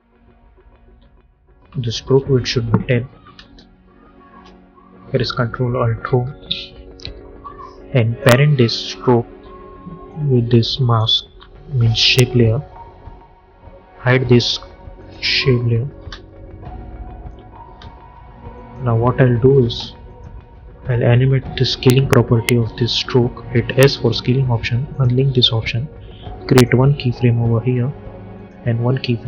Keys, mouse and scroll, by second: 2.2 click, 4.2 Return, 5.9 ctrl+alt+Home, 8.1-11.9 drag, 14.9 click, 15.8 space, 18.4 click, 19.4 j, 20.0 click, 23.7 s, 24.8 click.